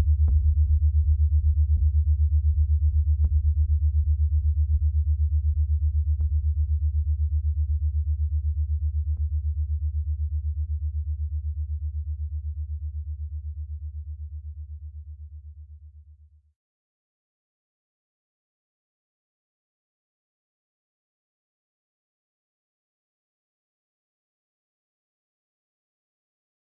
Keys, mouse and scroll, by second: 1.0-1.4 scroll up 2, 1.6 middle click, 2.0-7.4 middle drag, 7.4-8.6 scroll up 2, 8.6-9.9 scroll up 1, 10.1 middle click, 10.7-17.0 middle drag, 17.0-23.7 drag, 26.3-26.7 drag.